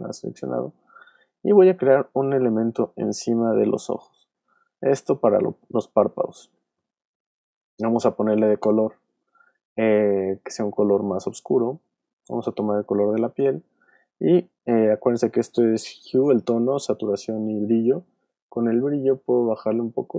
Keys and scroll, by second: 7.3 v.